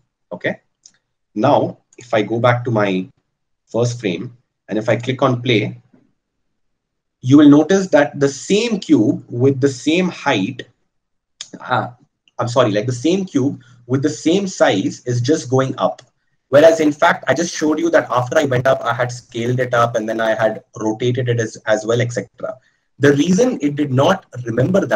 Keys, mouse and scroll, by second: 14.2-24.9 drag.